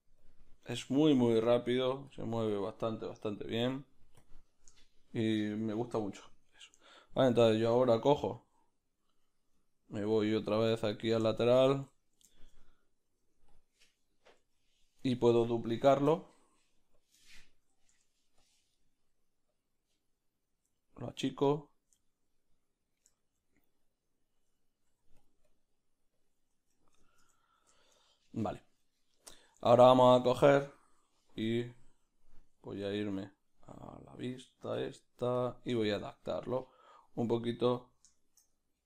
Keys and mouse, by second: 4.4 q, 4.8-10.6 shift+middle drag, 11.7 Tab, 11.9 ctrl+middle click, 12.3 shift+middle click, 13.1-15.9 middle drag, 13.1 g, 15.9 shift+d, 17.2-20.5 shift+middle drag, 18.5 Tab, 18.5 b, 19.5 click, 20.5-25.2 drag, 20.8 ctrl+middle click, 22.1-24.2 ctrl+middle drag, 25.2 middle click, 25.2 f, 25.9-27.0 drag, 26.7 Tab, 27.0-30.1 shift+middle drag, 30.1-32.6 shift+right drag, 32.6 Right, 35.4 q, 35.8-37.2 shift+middle drag, 37.2-38.8 right drag.